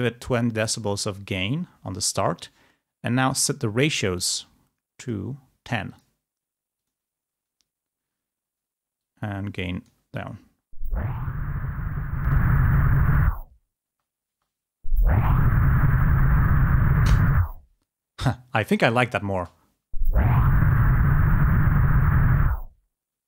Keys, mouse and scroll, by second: 5.0 click, 6.0 click, 7.0 click, 9.2-10.3 drag, 10.3 space, 12.3-13.7 drag, 14.1 space, 18.4 space, 19.8 space.